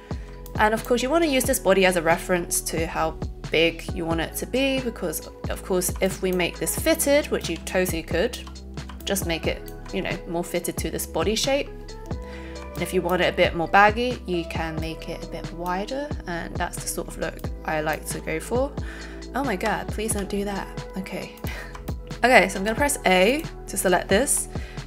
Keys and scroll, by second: 20.0 ctrl+z, 22.7 a.